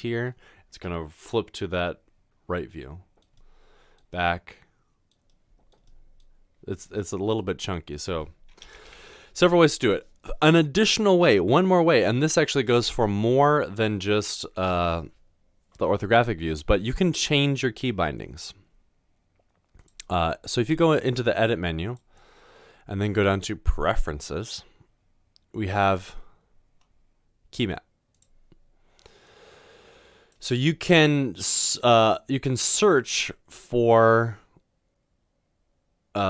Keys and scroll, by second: 8.7 typing.